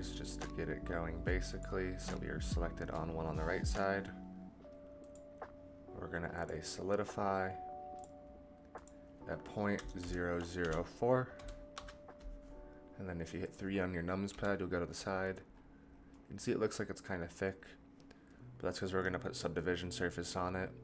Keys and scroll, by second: 14.3 KP_3.